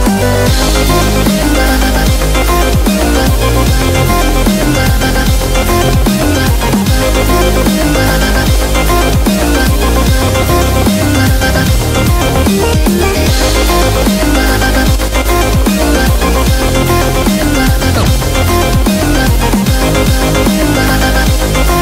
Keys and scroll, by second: 1.8-5.1 typing, 9.6 super+-, 9.8 super+-, 13.5 super+=, 13.7 super+=, 13.9 super+=, 16.2 super+=, 18.1 v.